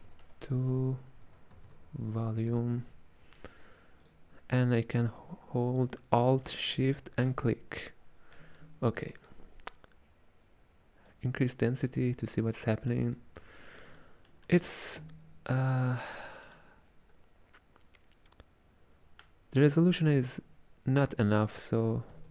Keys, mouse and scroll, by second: 7.6 alt+shift+click, 8.8-11.2 ctrl+middle drag, 11.2-12.7 drag, 12.7-15.6 middle drag, 15.6 click, 16.3-21.0 middle drag, 21.0-22.3 drag.